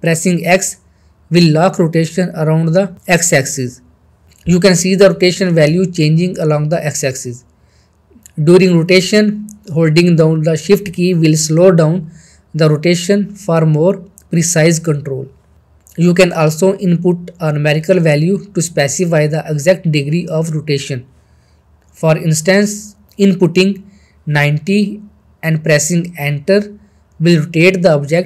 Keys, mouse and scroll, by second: 2.1 shift+Num_Lock, 6.9 shift+Num_Lock, 26.2-27.8 middle drag.